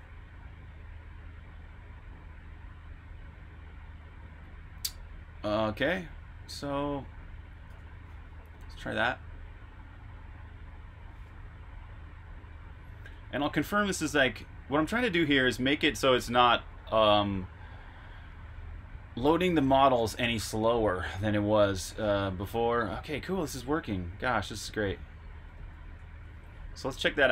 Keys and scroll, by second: 1.6-2.7 typing, 4.5-6.5 typing, 7.7 super+b, 7.7-8.8 typing, 13.0 super+r, 13.3-14.2 typing, 21.4-24.9 typing, 25.9 typing, 26.1 super+q.